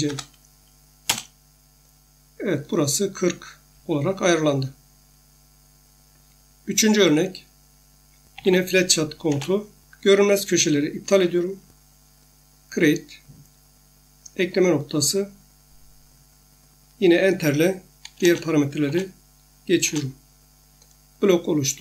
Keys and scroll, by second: 0.0-0.1 typing, 1.1 Return, 4.2 Escape, 8.1-10.3 typing, 9.3 Return, 18.2 Return.